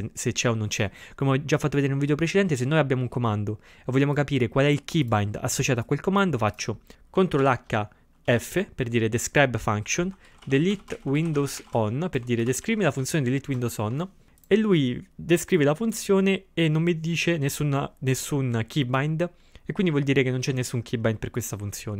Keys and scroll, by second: 7.4 ctrl+h, 8.3 f, 10.1-13.5 typing.